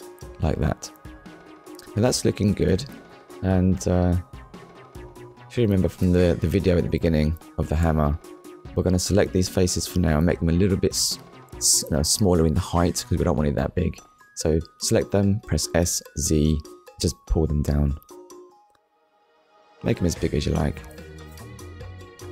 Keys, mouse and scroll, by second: 4.6 click, 5.5 middle click, 7.1 alt+click, 8.5 alt+shift+click, 9.5 alt+shift+click, 10.5 alt+shift+click, 11.4 middle click, 19.2 click, 19.8 middle click, 21.1 middle click.